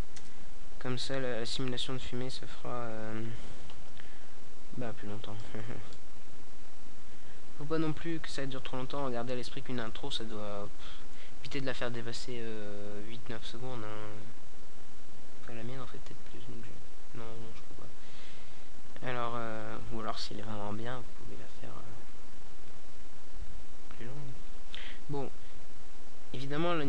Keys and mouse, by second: 15.1 alt+a, 18.3-23.1 drag.